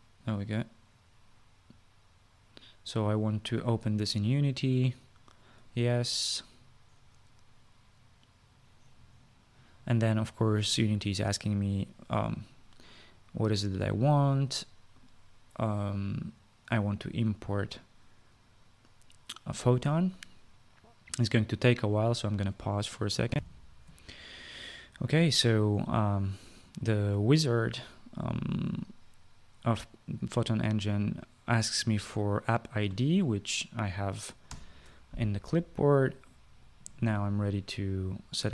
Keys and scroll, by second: 24.0 shift+F9, 24.1 shift+F9, 35.2 ctrl+v.